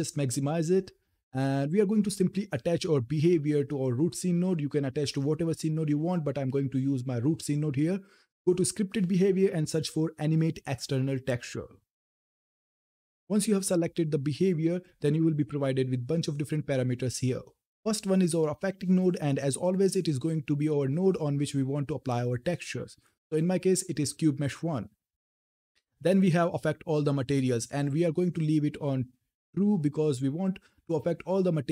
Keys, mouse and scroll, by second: 4.4 click, 12.4 click, 14.6-17.4 drag, 19.0 click, 23.0 click.